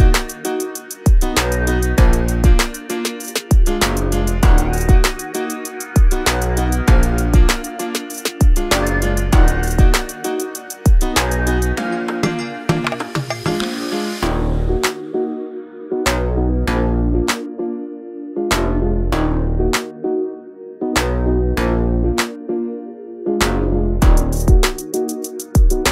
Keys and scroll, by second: 0.4 s, 7.2 space, 7.4 Escape, 8.6 m, 12.7 Escape, 13.5 Up, 14.0-16.2 typing, 21.7 q, 23.6 m, 24.7 space, 25.8 s.